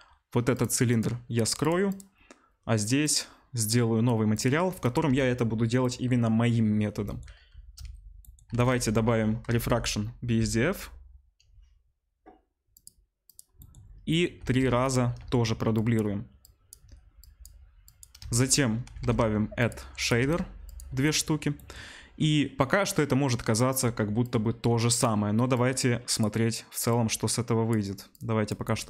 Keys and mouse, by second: 0.5 click, 0.6 middle click, 0.8 click, 1.0 middle click, 1.6-1.9 drag, 1.9-3.0 middle drag, 3.0-4.3 drag, 4.3-4.8 middle drag, 4.8 click, 4.9-16.4 middle drag, 5.0 Delete, 8.6 shift+a, 14.4 shift+d, 15.2 shift+d, 16.4-20.0 drag, 18.2 shift+a, 19.1 d, 20.0-22.5 shift+middle drag, 20.2 shift+d, 22.5-28.8 drag.